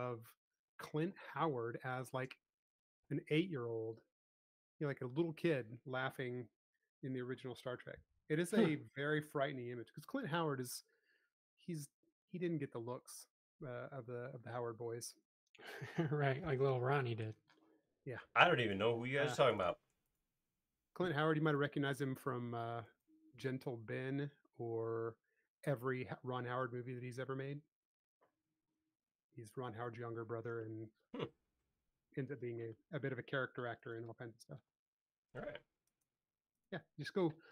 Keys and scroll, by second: 0.1 space.